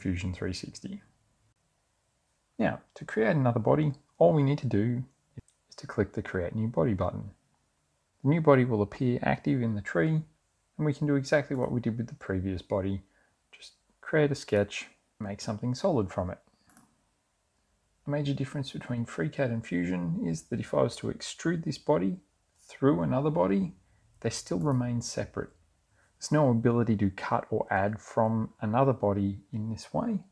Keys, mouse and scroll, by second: 6.5 click, 9.0 click, 10.1 click, 11.7 click, 12.8 click, 13.5 click, 14.6 click, 16.0 click, 21.4 click.